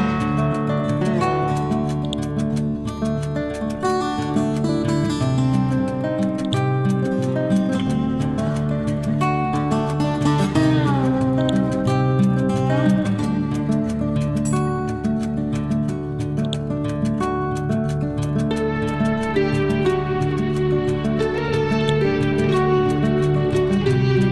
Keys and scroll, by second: 12.1 Down.